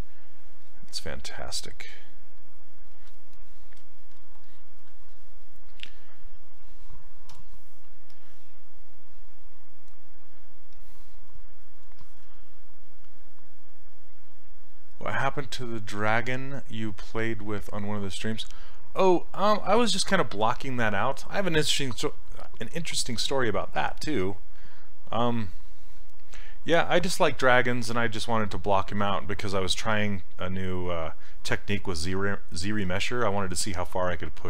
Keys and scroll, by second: 7.4 w.